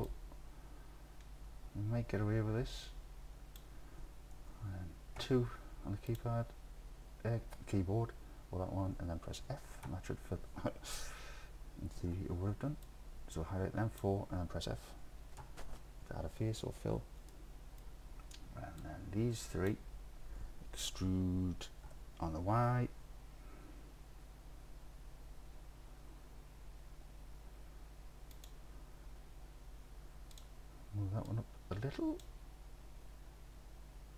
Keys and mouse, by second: 0.1-3.6 drag, 5.2 2, 6.1 click, 9.9 f, 11.0 ctrl+z, 12.1 1, 12.9-14.0 drag, 15.4 f, 17.4 middle click, 17.6 click, 18.9 click, 21.9 e, 22.6 y, 28.4 click, 31.3 click.